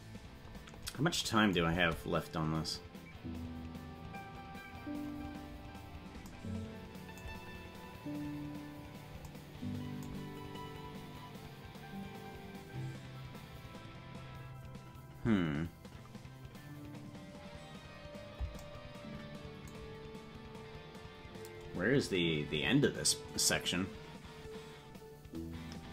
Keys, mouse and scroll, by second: 0.4 scroll down 1, 1.6 space, 5.3 scroll down 1, 6.2 scroll down 3, 8.5 scroll down 2.